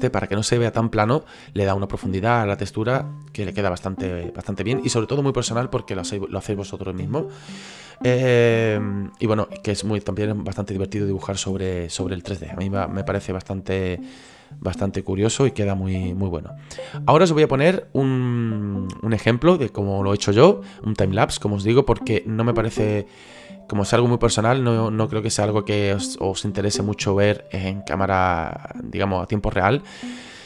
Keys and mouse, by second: 1.2 middle click, 9.1 middle click, 10.4 middle click, 13.1 click, 14.7 middle click, 24.9 click, 25.4 middle click, 26.0 click, 26.8 middle click, 27.5 click, 28.6 click.